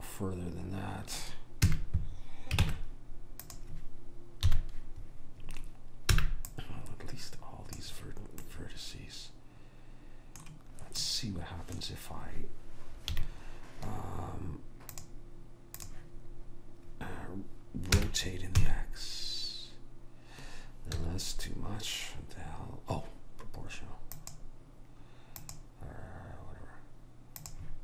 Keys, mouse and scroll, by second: 1.8 a, 2.8 ctrl+Tab, 4.6 KP_3, 7.8 b, 8.6-10.4 middle drag, 11.1-13.3 middle drag, 13.3 KP_3, 15.1 click, 18.1 r, 24.3-27.4 drag.